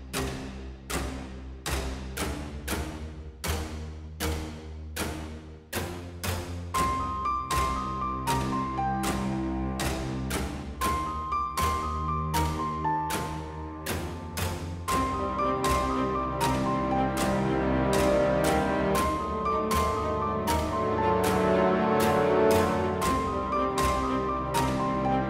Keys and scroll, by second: 0.1 g, 2.4 ctrl+b, 9.0 3, 13.8 s, 20.5 ctrl+r.